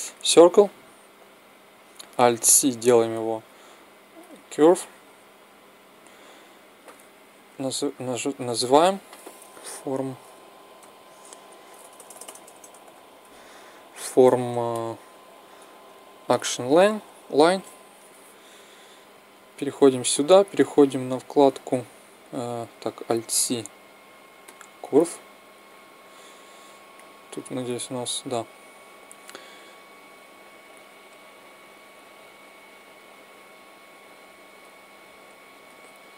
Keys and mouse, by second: 2.0 alt+c, 7.2 n, 11.6 BackSpace, 19.1-22.1 right drag, 22.8 alt+c, 25.4-27.1 drag, 27.1-28.5 right drag, 32.7-34.3 right drag, 34.3 middle click, 34.9-36.1 drag.